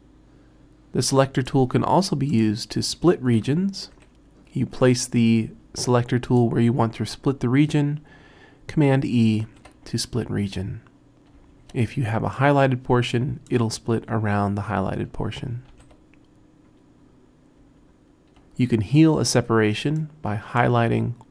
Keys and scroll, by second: 4.0 t, 9.5 super+e, 11.5 super+z, 15.7 super+e.